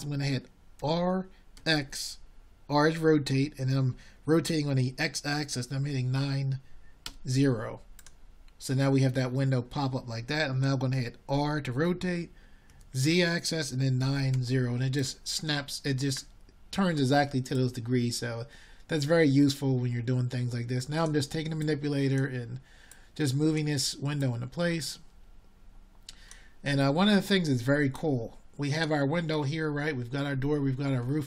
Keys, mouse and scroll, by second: 8.2 s, 13.7 r, 24.4 r, 28.3-31.2 middle drag.